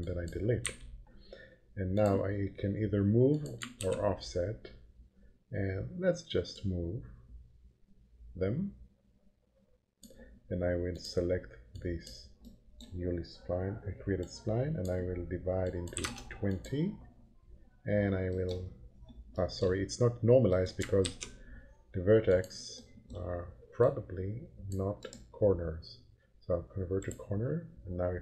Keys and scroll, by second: 0.6 Delete, 3.8 ctrl+p, 15.7-16.5 typing, 21.1 ctrl+z.